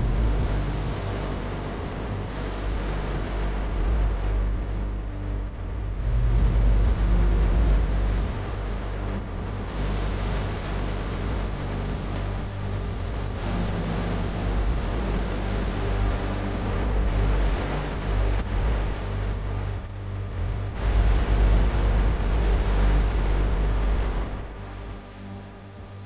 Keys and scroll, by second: 4.1 space, 6.5 ctrl+z, 11.8 x, 20.0 space, 23.0 ctrl+z.